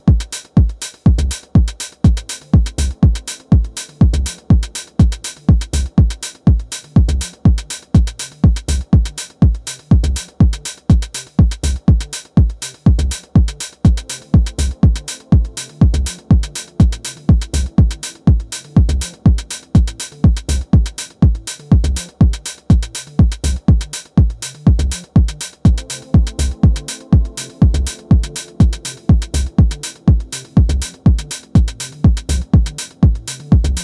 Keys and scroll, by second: 21.7 space, 27.7 space, 31.2 super+z.